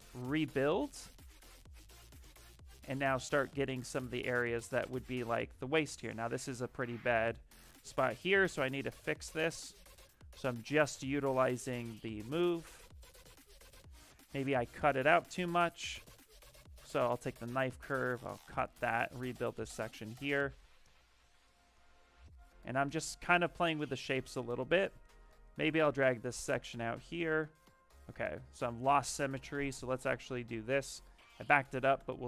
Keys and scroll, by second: 9.4 s, 26.8 ctrl+z, 27.0 ctrl+z, 28.7 x.